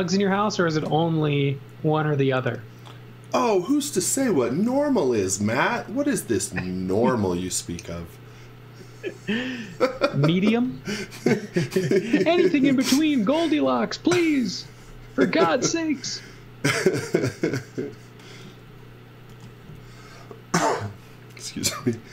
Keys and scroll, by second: 13.6 z, 14.4 space, 16.0 z, 18.4 z, 19.3 x.